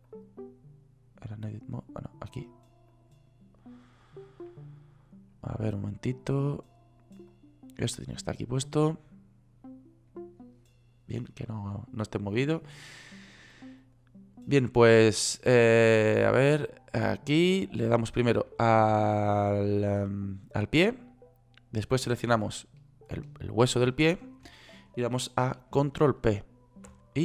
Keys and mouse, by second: 5.0 click, 7.8-8.8 drag, 9.3-9.8 drag, 15.4 middle click, 19.0-23.6 right drag, 26.5 ctrl+p.